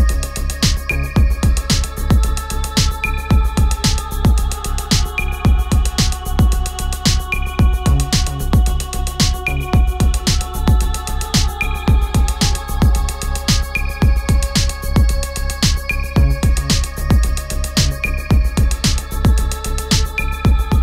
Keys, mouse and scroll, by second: 6.4 click, 8.5 ctrl+t, 9.4-18.1 drag, 20.5-20.8 drag.